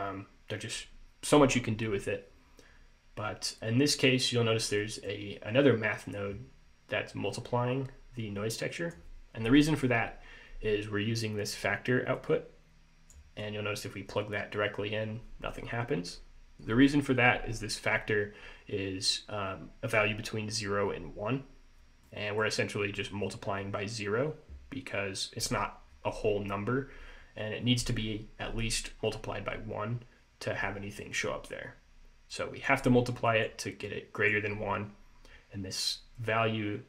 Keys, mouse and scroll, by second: 4.9 click, 8.7 click, 12.3 click, 13.5 click, 22.2 middle click, 32.4 click, 33.4 click, 34.0 click, 36.3 click.